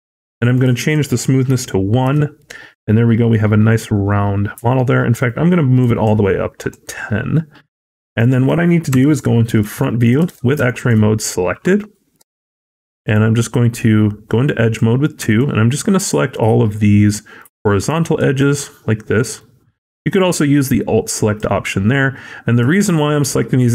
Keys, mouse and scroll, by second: 0.4 click, 5.7 click, 6.5 click, 7.2-7.8 scroll down 3, 7.5 middle click, 8.1-8.5 scroll up 1, 8.8 KP_1, 9.2 scroll up 4, 9.7 shift+middle click, 9.9 shift+scroll up 1, 10.2 alt+z, 10.5 shift+middle click, 10.8-11.2 scroll up 2, 12.1 2, 12.9 click, 15.2 shift+click.